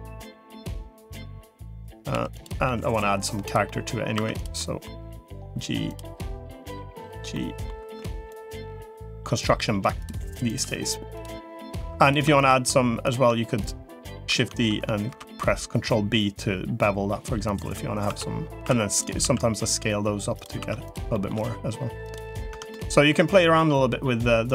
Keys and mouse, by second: 0.4 middle click, 1.0 g, 2.0 2, 2.6 g, 3.6 middle click, 4.0 1, 4.2 click, 4.4 middle click, 5.0 g, 6.6 g, 7.2 middle click, 8.4 g, 9.4 g, 10.6 g, 11.6 2, 12.2 shift+click, 15.0 ctrl+b, 18.0 1, 18.6 3, 18.6 2, 19.0 s, 20.4 1, 21.0 middle click, 21.2 g, 22.4 Tab, 22.6 middle click, 23.2 middle click.